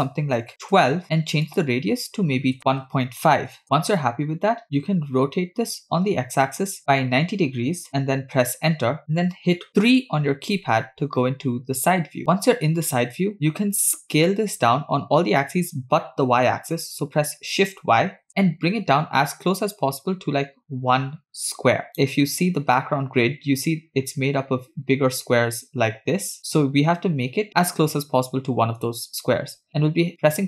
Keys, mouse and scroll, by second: 2.0-4.0 drag, 5.3 r, 9.9 KP_3, 12.2-12.7 scroll up 3, 15.5 s.